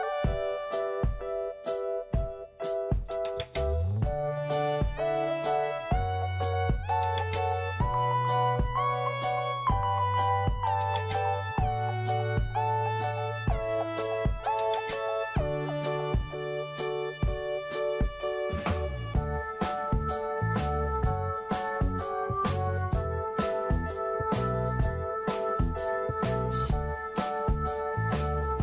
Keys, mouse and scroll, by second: 0.3-0.9 scroll down 2, 3.8-5.4 drag, 6.7 middle click, 7.6 click, 8.1 middle click, 9.1 click, 10.0-13.3 scroll up 1, 13.3 click, 14.4-15.5 scroll up 1, 15.5 click, 17.9-18.5 scroll up 1, 18.5 click, 23.9-24.9 scroll down 1, 25.4-28.6 drag.